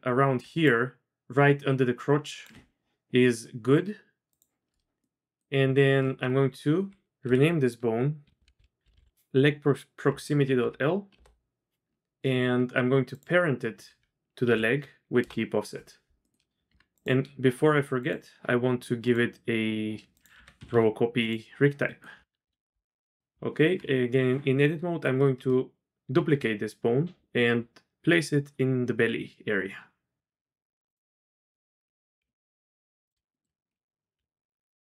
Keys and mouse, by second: 0.4 d, 0.6-2.5 drag, 2.5 d, 4.3 click, 5.0 click, 6.1 F2, 13.1 shift+click, 14.4 ctrl+p, 16.2 click, 16.7 Tab, 18.0 click, 20.2-21.3 drag, 21.8 click, 22.4 KP_3, 23.3 Tab, 26.1 shift+d, 32.2 g, 33.3 shift+click, 33.7 z, 34.2 g.